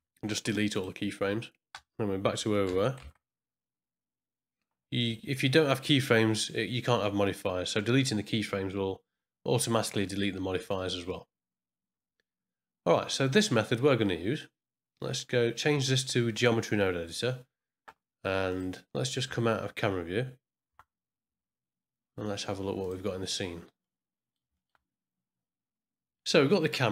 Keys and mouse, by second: 1.7 space, 2.6 space, 3.1 shift+Left, 13.3 click, 16.0 click, 18.5 click, 20.6 KP_0, 22.8 click, 23.8 middle click, 24.5 ctrl+middle click, 26.3 click.